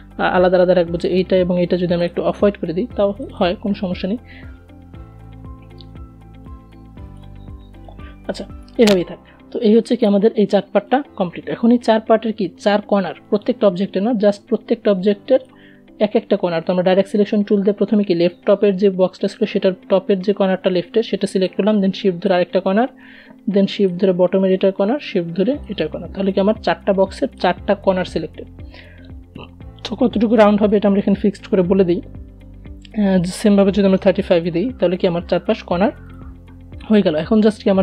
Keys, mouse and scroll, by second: 10.7 a, 11.6-19.8 drag, 19.8-29.0 shift+drag, 30.7 BackSpace, 34.4 click.